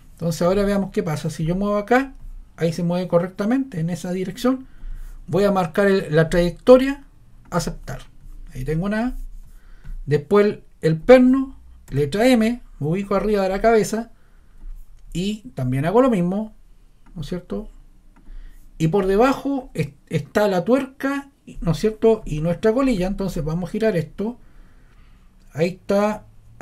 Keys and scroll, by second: 11.9 m.